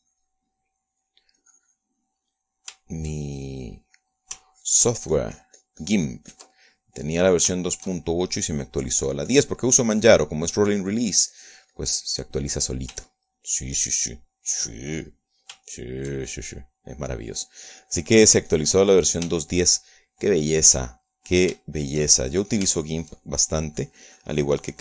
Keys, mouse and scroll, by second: 0.0 middle click, 1.0-2.3 drag, 1.9 middle click, 2.8 click, 3.5-5.1 middle drag, 5.2 shift+middle click, 5.9-8.0 ctrl+drag, 8.1 ctrl+click, 9.0 shift+click, 9.9-11.0 shift+drag, 11.1 shift+click, 11.5-14.3 shift+drag, 14.5 shift+right click, 14.8 shift+middle click, 17.1 shift+middle click, 18.1 middle click, 18.7-20.6 drag, 20.9 shift+middle click, 21.8-23.0 shift+middle drag, 23.9 shift+middle click, 24.3 shift+middle click.